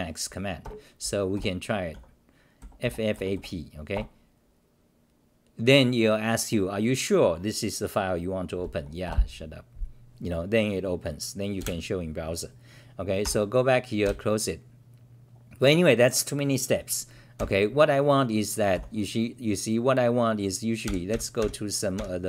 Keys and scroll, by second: 0.6 ctrl+g, 1.3 g, 4.3 Return, 9.3 Return, 11.7 ctrl+r, 14.0 ctrl+w, 18.7 n.